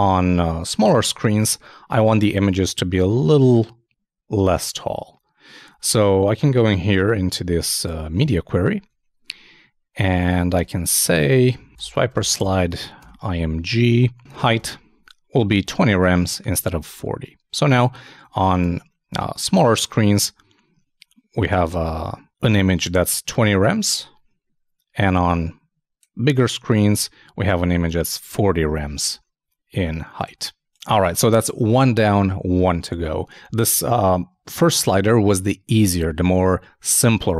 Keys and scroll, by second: 12.7 shift+[, 13.0 shift+Return, 15.8 super+s, 16.9 super+s, 16.9 super+Tab, 18.5 super+r.